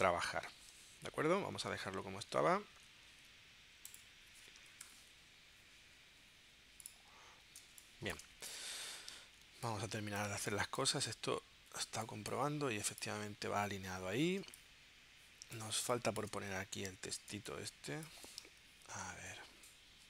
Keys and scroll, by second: 0.9 super+z, 4.8 shift+super+p, 7.6 space, 9.4 space, 11.9 space, 14.4 space, 17.3 space.